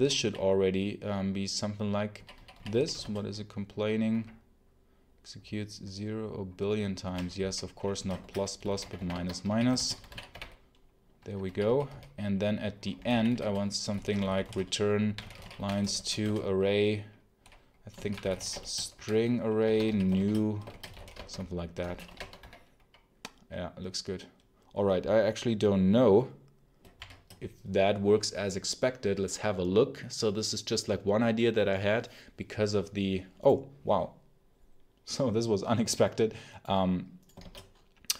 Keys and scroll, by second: 0.1 k, 2.0 k, 2.2 k, 2.9 alt+Return, 7.0 Escape, 7.8-15.9 typing, 16.1 Return, 17.6-22.4 typing, 26.8 shift+F10, 37.3 shift+Escape.